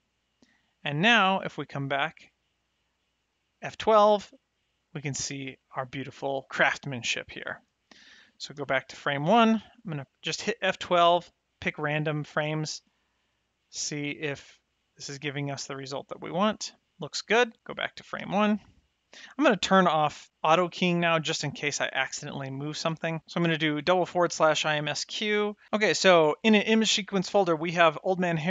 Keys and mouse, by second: 2.3 click, 3.6 F12, 8.5 shift+click, 10.0 F12, 11.3 click, 12.0 F12, 13.4 click, 13.8 F12, 15.2 click, 15.7 F12, 18.1 shift+Left, 20.4 click.